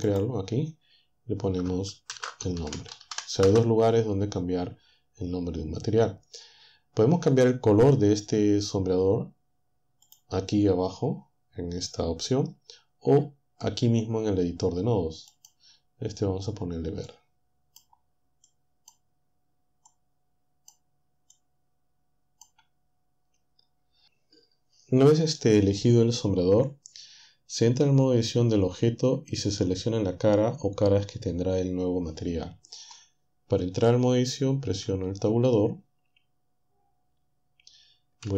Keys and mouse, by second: 0.1-1.6 drag, 2.1-3.4 typing, 10.1-12.7 drag, 15.4 click, 17.1-18.1 drag, 18.5-19.8 drag, 19.9 click, 21.4-22.6 drag, 34.6 Tab.